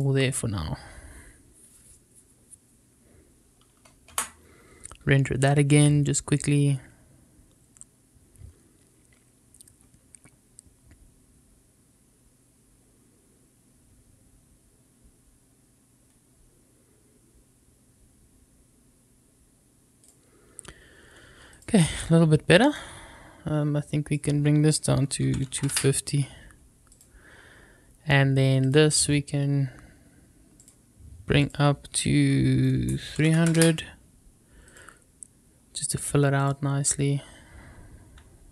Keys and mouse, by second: 0.0 click, 4.4 F12, 21.4 click, 22.6-24.0 drag, 24.1-26.1 drag, 26.9 click, 28.6 click, 30.6 click, 31.5-34.2 drag, 33.3 KP_0, 36.3 click.